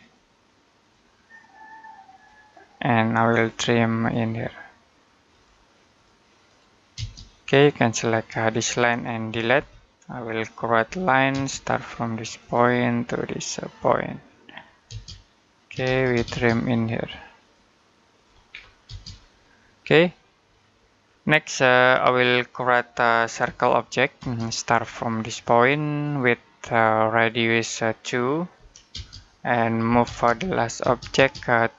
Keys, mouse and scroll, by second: 6.8 space, 7.9 click, 9.4 Delete, 10.7 l, 11.1 space, 12.2 click, 14.7-16.0 typing, 17.2 click, 18.3-18.7 scroll down 1, 18.7 space, 19.1 middle click, 20.9-21.3 scroll up 1, 21.3 middle click, 23.3 c, 24.0 space, 25.8 click, 28.7-30.6 typing, 31.5 click.